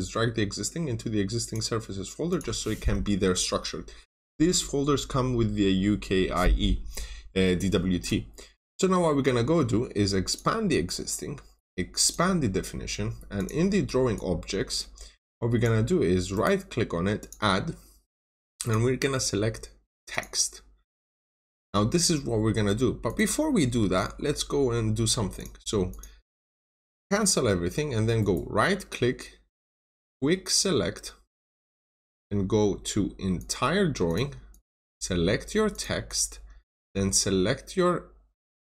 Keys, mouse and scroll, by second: 16.3 right click, 17.1 click, 23.7 Escape, 24.0 scroll up 1, 25.3 click, 26.4-26.9 scroll down 2, 26.5 middle click, 27.4 scroll up 1, 28.1 right click, 31.5 click, 34.4 double click, 35.6 click, 36.8-38.6 scroll down 1.